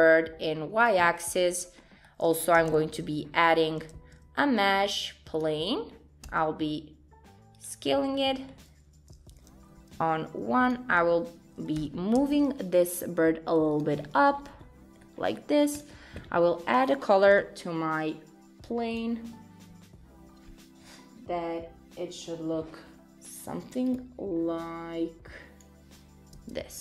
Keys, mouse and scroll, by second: 1.7 middle click, 1.8 scroll down 3, 2.0 middle click, 2.8 shift+a, 3.9 shift+a, 6.3 s, 7.8-9.3 scroll down 5, 8.2 middle click, 9.6 KP_1, 10.7 click, 11.8 g, 14.0-14.6 scroll up 8, 14.5 middle click, 15.2 scroll down 3, 15.4 middle click, 15.8 click, 17.5 Tab, 18.9 click, 23.9 click, 26.4 Tab.